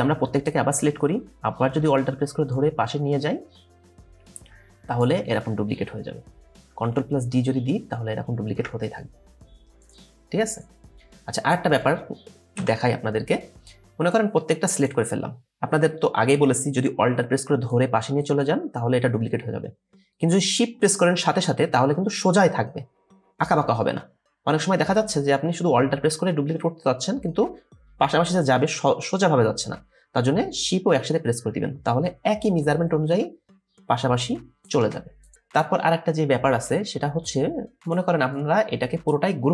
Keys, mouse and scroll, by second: 2.6 alt+click, 7.3 ctrl+d, 7.8 ctrl+d, 8.5 ctrl+d, 12.6 Delete.